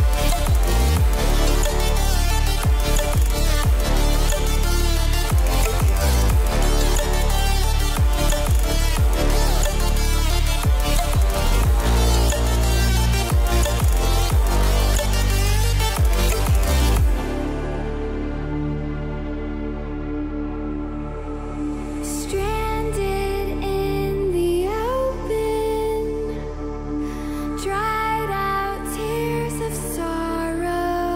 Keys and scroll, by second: 29.1 ctrl+j.